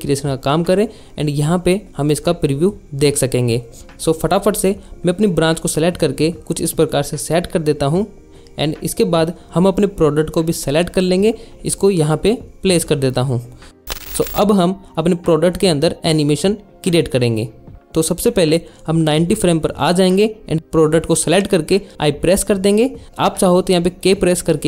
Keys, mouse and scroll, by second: 0.5 middle drag, 2.3-3.1 drag, 3.5 click, 6.3 click, 6.9 ctrl+m, 6.9 y, 7.5 alt+shift+z, 7.5 alt+shift+z, 7.7 alt+shift+z, 7.8 alt+shift+z, 7.8 click, 10.9 click, 12.2 click, 12.9 alt+shift+z, 13.5 drag, 19.2-24.6 drag.